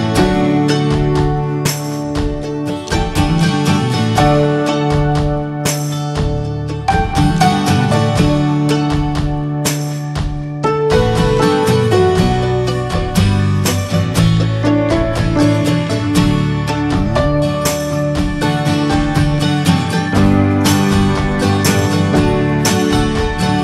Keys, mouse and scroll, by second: 0.0 alt+middle click, 0.4-0.7 scroll up 2, 0.7-1.1 shift+middle drag, 1.1 s, 3.0 click, 3.2 scroll down 1, 3.4 middle drag, 3.7 click, 3.9 middle click, 4.3 ctrl+s, 4.7 middle drag, 4.8 ctrl+s, 5.3-6.1 middle drag, 6.1 ctrl+s, 6.3 click, 6.8-7.6 alt+middle drag, 7.6 shift+d, 8.8 click, 10.0 r, 11.8-12.4 scroll up 1, 12.4-13.5 drag, 13.5 scroll down 1, 13.7-14.8 middle drag, 14.8 scroll up 2, 15.0 shift+middle drag, 15.2 ctrl+s, 15.4 click, 15.6-16.3 scroll up 3, 15.7 shift+middle click, 15.9 Tab, 16.2 middle click, 16.4 middle click, 16.7 Tab, 16.8 scroll down 3, 17.0 click, 17.2-17.6 middle drag, 17.6 click, 18.4 click, 18.7 Tab, 18.9 scroll up 1, 19.2 alt+middle click, 19.3 alt+z, 19.8 click, 20.3 Tab, 20.7 middle click, 20.9 alt+z, 21.1-21.9 shift+middle drag, 21.9 3, 22.0 click, 22.7 click, 23.0 Tab, 23.3 click.